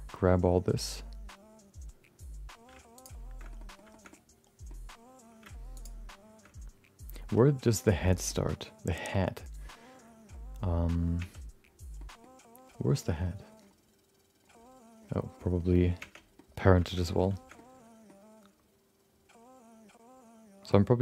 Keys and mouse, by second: 0.1 middle click, 3.4 middle click, 3.6 middle click, 3.9 shift+middle click, 4.1 middle click, 5.7 shift+click, 8.2 middle click, 11.5 Tab, 11.9 middle click, 16.0 Tab, 16.3 middle click, 16.8 middle click, 17.0 middle click, 17.5 middle click.